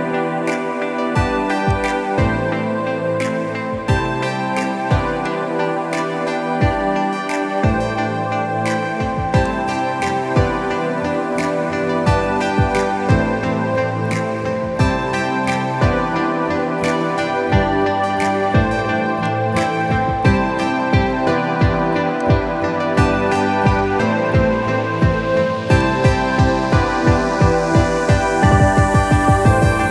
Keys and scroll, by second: 7.3 ctrl+d, 8.0 v, 17.4 ctrl+t, 26.8 Return, 27.5 ctrl+=, 27.8 ctrl+=, 27.9 ctrl+=.